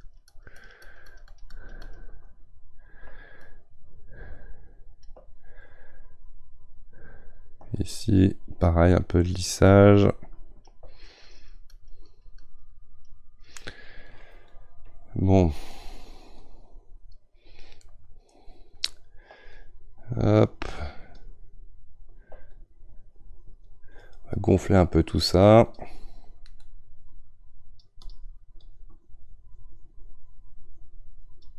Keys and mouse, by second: 17.9-19.5 middle drag, 19.5-27.4 shift+drag, 27.4-28.6 right drag, 28.6-31.5 drag.